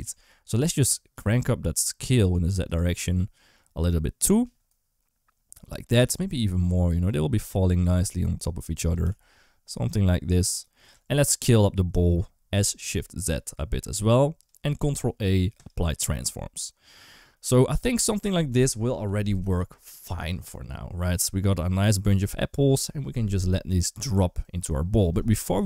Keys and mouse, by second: 0.2 3, 0.5 click, 1.0 g, 2.8 s, 5.8 g, 7.9 s, 8.8 g, 10.8 Tab, 11.1 click, 11.4 s, 14.8 ctrl+a, 19.4 ctrl+s.